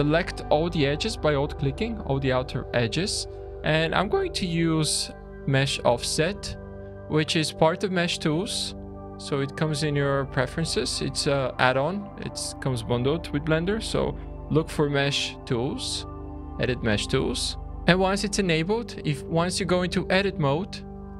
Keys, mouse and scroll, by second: 0.8-2.1 scroll up 2, 2.1-2.5 scroll up 2, 4.7 click, 7.9 click, 9.5 click, 20.1 middle click, 20.1 scroll.